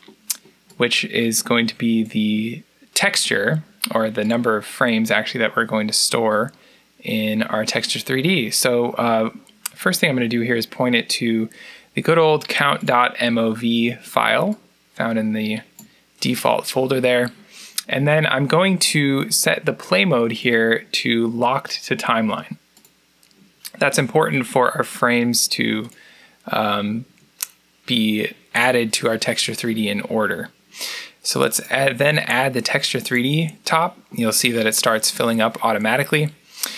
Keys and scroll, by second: 30.0 t.